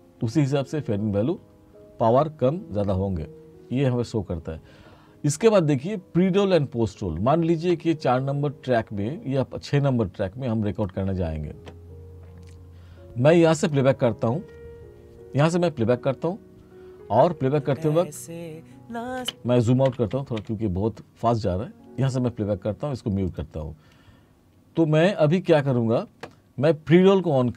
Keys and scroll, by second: 17.6 space, 19.3 space, 20.0 r.